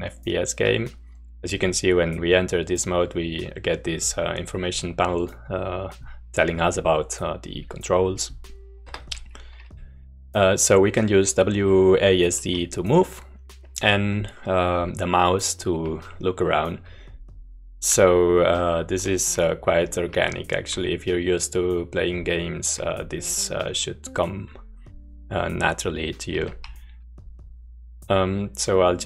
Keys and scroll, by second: 8.9 Escape, 15.8-16.8 w, 16.8-18.0 a, 18.2 s, 18.5-19.7 s, 26.4 w, 26.6-29.0 w.